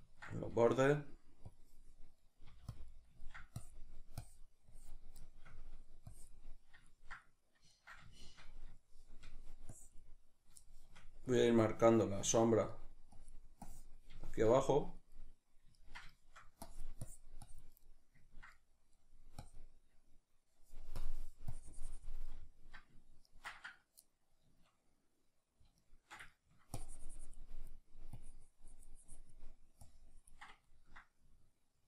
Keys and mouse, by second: 2.5 f, 2.8 click, 2.9 middle click, 3.6-5.3 drag, 5.3 shift+middle click, 6.1 click, 6.9-9.7 ctrl+middle drag, 9.7 click, 10.7 shift+middle click, 11.4-12.7 drag, 12.7 middle click, 13.2-14.3 drag, 14.3-16.7 shift+middle drag, 16.7-17.8 drag, 17.8-19.5 middle drag, 19.5-25.2 drag, 25.2-26.9 ctrl+middle drag, 26.9-31.7 drag, 31.7-31.8 ctrl+middle drag.